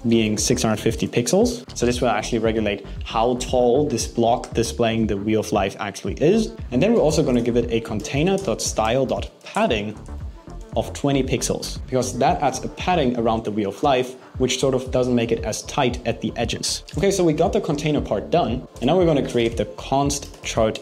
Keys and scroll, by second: 6.5 super+z, 9.8 shift+=, 10.2 shift+space, 11.5 BackSpace, 18.6 BackSpace.